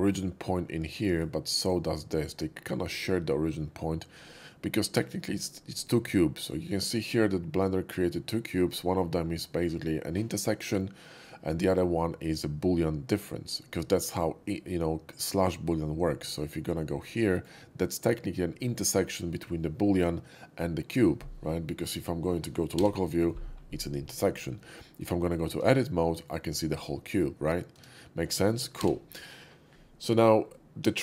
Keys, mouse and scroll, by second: 0.9 click, 1.6 click, 2.2 scroll up 1, 16.4 click, 16.9-17.4 middle drag, 22.8 /, 23.3 /, 23.5 middle click, 23.7 middle click, 25.5 Tab, 25.9 middle click, 27.8 Tab, 28.7 /, 30.4-31.0 middle drag.